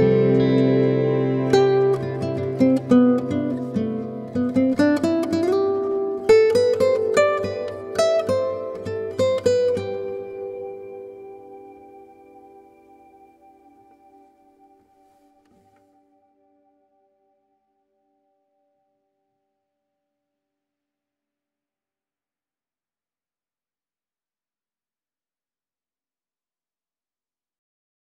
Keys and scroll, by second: 22.9 -.